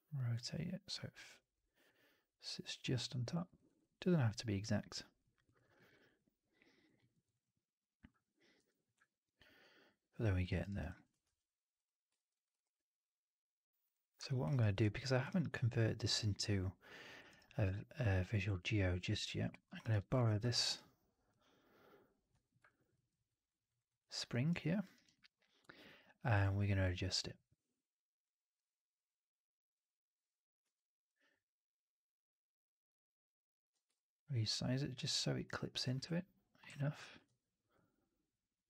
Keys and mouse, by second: 2.6 click, 3.3 alt+right drag, 3.5 alt+right drag, 3.7-5.1 alt+drag, 5.2 alt+drag, 5.4 alt+drag, 5.6 alt+middle drag, 5.8 alt+right drag, 6.0-6.7 alt+drag, 6.9 alt+middle drag, 7.1 alt+right drag, 7.3-7.9 alt+drag, 10.4 alt+right drag, 10.6 alt+right drag, 10.7 alt+drag, 11.1 ctrl+s, 12.1 alt+middle drag, 12.2 alt+right drag, 12.4 alt+drag, 13.7 click, 14.2 alt+middle drag, 14.4 alt+right drag, 14.7 alt+drag, 15.0 alt+middle drag, 15.2-15.7 alt+right drag, 17.2 alt+right click, 17.4-19.4 alt+drag, 19.5 alt+middle drag, 19.7 alt+right drag, 19.8 alt+click, 20.2 ctrl+d, 22.2 f, 22.5 alt+click, 22.8 alt+middle drag, 23.1 alt+right drag, 23.5 alt+right drag, 23.7 alt+right drag, 23.9 alt+drag, 24.2 right drag, 24.4 right drag, 24.5 drag, 24.8 right drag, 25.0-25.6 alt+drag, 25.7-26.2 alt+drag, 33.6 w, 33.8-34.8 drag, 35.3-35.7 right drag, 35.9 r, 36.5 w, 36.7 alt+drag, 36.9 alt+drag, 37.1 w, 37.6-38.6 drag.